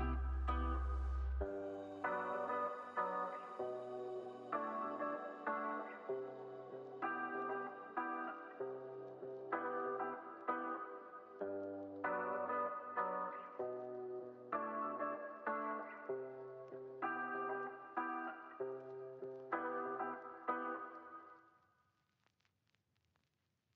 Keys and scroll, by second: 0.3 space, 0.6 super+s, 5.4 space.